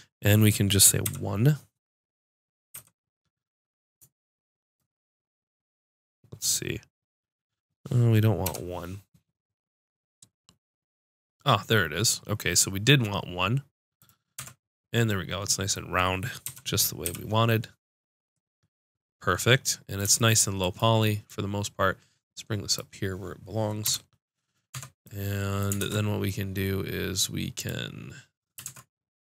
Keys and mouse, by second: 14.0 click, 14.3 Tab, 15.1 middle click, 15.2-16.4 drag, 16.4 KP_Decimal, 17.0 KP_5, 21.2-22.7 drag, 23.8 KP_Decimal, 24.7 Tab, 25.4 click, 25.8 ctrl+Tab, 28.6 ctrl+Tab.